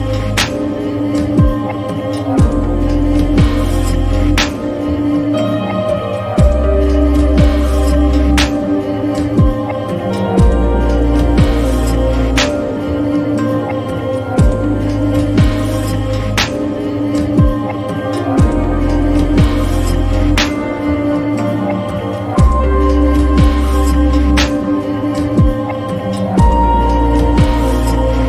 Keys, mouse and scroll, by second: 14.5-17.3 drag, 18.9-27.4 drag.